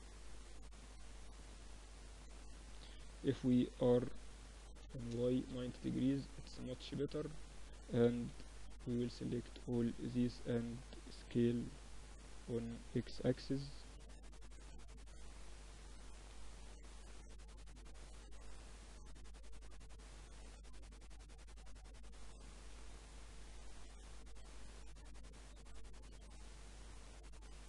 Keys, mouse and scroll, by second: 1.1 Tab, 2.4 r, 5.4 Tab, 6.1 a, 6.5 a, 7.3 b, 9.6 a, 10.5 b, 12.3 s, 14.1 Tab, 14.5-16.3 drag, 14.8 Tab, 15.3 a, 16.3 middle click, 18.1-20.0 drag, 18.8 a, 20.0 KP_1, 20.6 a, 20.9 a, 21.7 b, 22.9-24.7 drag, 24.9-27.6 drag.